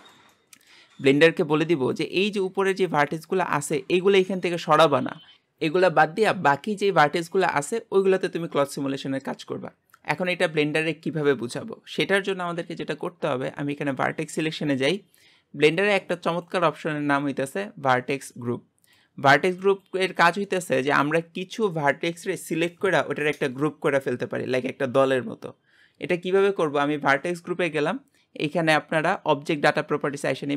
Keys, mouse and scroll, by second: 1.0-6.0 scroll up 1, 6.0-13.8 scroll up 1, 13.8 click, 14.4-30.5 middle drag.